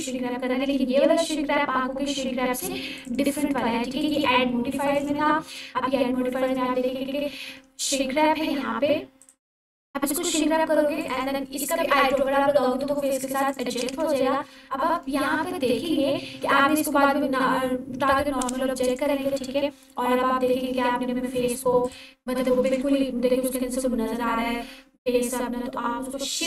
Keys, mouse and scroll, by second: 3.0 click, 9.2 click, 16.7 click, 21.4-21.8 scroll up 1, 22.2-22.8 alt+click.